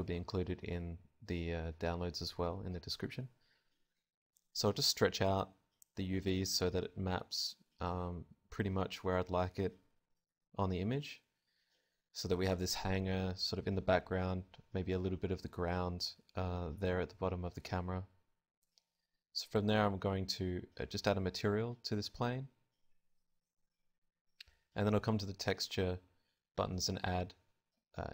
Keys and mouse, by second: 1.3 Tab, 2.5 s, 3.3 click, 4.0 right click, 4.0 g, 8.3 middle click, 8.7 click, 9.6 g, 9.7 middle click, 11.9-13.3 drag, 12.1 Tab, 13.6 z, 16.1 alt+z, 16.3-18.3 drag, 19.3-28.1 drag.